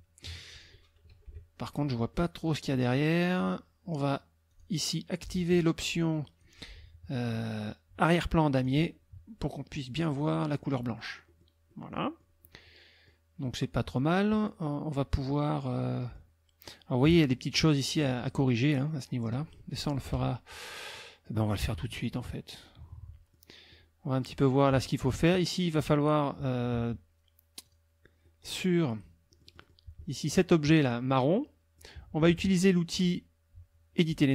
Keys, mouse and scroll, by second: 1.1 KP_Subtract, 2.1 middle click, 4.5 click, 5.9 click, 8.6 click, 10.0 click, 10.5 middle click, 11.3 middle click, 11.6 click, 11.7 click, 12.4 click, 15.0 click, 15.8 middle click, 17.3 click, 17.5 middle click, 20.0 KP_Subtract, 20.9 click, 21.6 click, 22.6 click, 22.8 middle click, 23.5 click, 23.7 click, 27.6 click, 28.3 click, 29.3 click, 30.0 click, 30.8 click, 31.3 click.